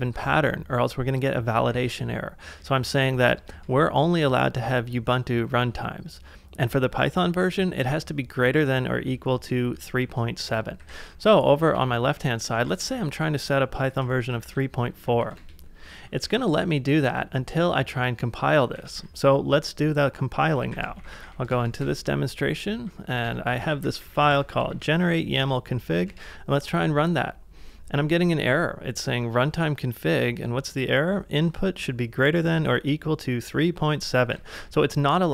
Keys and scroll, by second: 0.0-3.1 typing, 1.7 ctrl+c, 3.5 ctrl+c, 6.6 j, 7.4 h, 9.5 shift+6, 10.8 ctrl+w, 11.7-16.2 typing, 18.8 ctrl+a, 20.5-24.7 typing, 25.4 Tab, 26.1 Return, 34.3-35.3 typing.